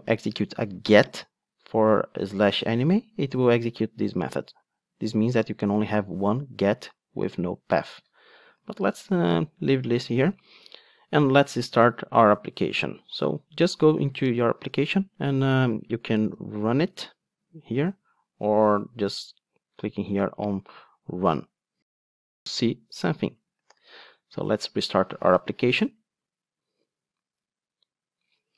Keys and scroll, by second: 8.7 super+z, 14.8 super+r, 23.8 super+r.